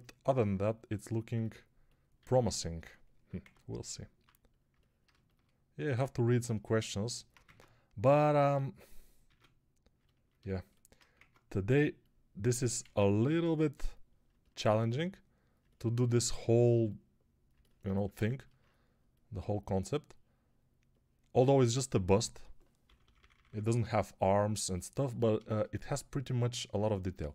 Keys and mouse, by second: 2.1 alt+q, 3.3 Tab, 4.1 3, 4.6-12.6 alt+middle drag, 5.8 x, 7.3 ctrl+Tab, 9.1 ctrl+Tab, 11.0 ctrl+Tab, 12.6-14.1 ctrl+drag, 14.1-15.4 alt+middle drag, 15.4-27.3 alt+drag, 22.9 [, 23.0 [, 23.2 [, 23.3 [.